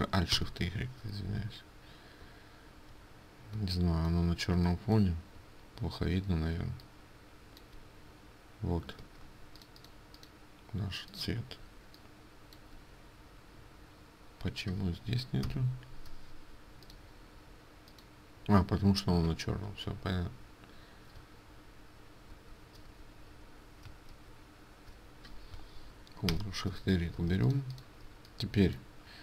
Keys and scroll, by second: 9.1 ctrl+space, 9.8 ctrl+alt+space, 20.0 ctrl+z, 22.4 ctrl+shift+z, 22.9 ctrl+z, 24.2 ctrl+shift+z, 27.2 ctrl+space, 28.5 ctrl+space.